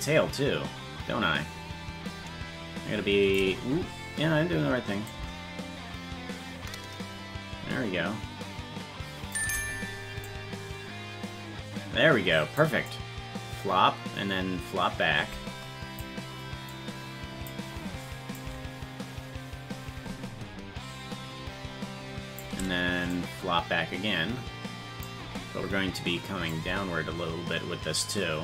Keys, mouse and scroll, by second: 5.0-9.3 drag, 10.2-12.6 drag, 12.9-16.0 drag, 16.7 click, 18.3-22.4 drag, 23.1-25.0 drag, 26.5-28.4 drag.